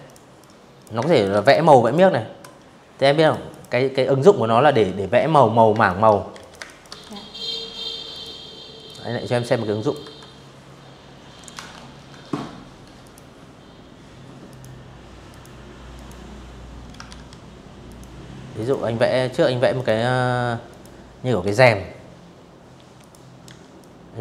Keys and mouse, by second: 0.9 click, 1.2 click, 2.8 Delete, 3.4 space, 3.5 click, 4.0 z, 4.1 click, 4.2 space, 4.3 click, 4.5 v, 4.6 click, 5.8 click, 6.5-7.6 drag, 7.7 v, 10.7 click, 12.1 click, 12.9 click, 13.6 click, 14.8 ctrl+z, 15.5 click, 16.2 click, 17.4 click, 18.3 click, 19.1 v, 20.6 click, 21.1 a, 21.5 click, 22.6 click, 23.8 shift+click.